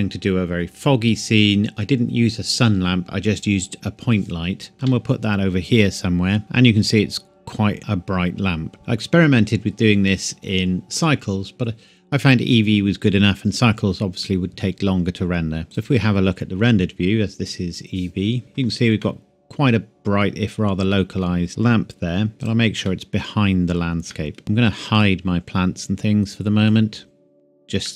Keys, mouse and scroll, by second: 4.7 KP_1, 4.8 g, 8.8 click, 15.6 click, 15.7 click, 19.0 middle click, 20.4-21.6 scroll up 1, 22.3 g, 22.4 click, 22.9 middle click, 24.4-24.9 scroll up 1, 25.0 click, 27.8 middle click.